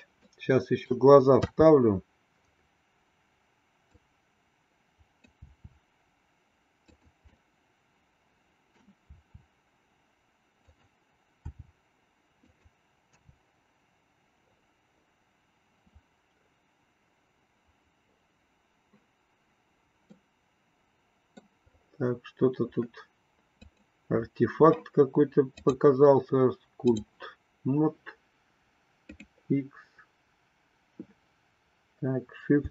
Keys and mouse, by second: 0.5 middle click, 1.4 KP_3, 3.9-5.4 drag, 5.5 r, 7.4-8.9 middle drag, 9.1 r, 11.4 g, 13.3 KP_0, 20.3-21.6 middle drag, 23.5 click, 25.4-27.5 drag, 29.4 click.